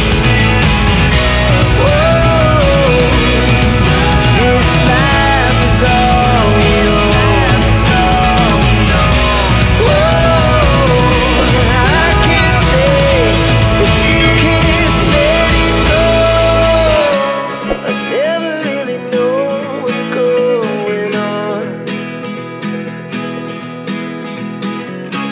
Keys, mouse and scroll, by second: 0.5 click, 1.7 2, 3.4 click, 5.3 scroll up 1, 6.0-6.5 scroll down 1, 6.5 scroll up 1, 8.0-8.7 scroll down 1, 10.5 scroll up 1, 11.9-12.6 scroll down 1, 13.2-14.1 scroll up 1, 14.1-14.4 scroll down 1, 15.0 click, 16.2 click, 17.2 click, 19.6 click, 20.2 click, 21.3 click, 22.8 click, 23.6 click, 24.0 click, 24.4 ctrl+n, 25.0 click.